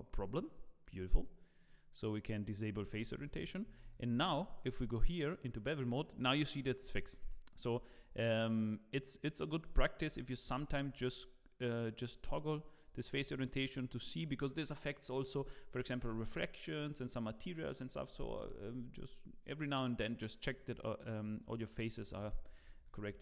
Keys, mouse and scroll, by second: 1.6 click, 2.8 scroll up 2, 3.1 shift+middle click, 3.5 scroll up 6, 3.9 shift+middle click, 5.1 click, 7.9 shift+click, 10.2-10.7 scroll down 4, 10.7 shift+middle click, 12.0 click, 13.1 scroll down 2, 13.4 middle click, 18.4-18.8 scroll down 3, 18.6 middle click, 20.4 click, 21.1 click, 22.3 scroll up 2, 22.6 middle click, 23.0 scroll up 2.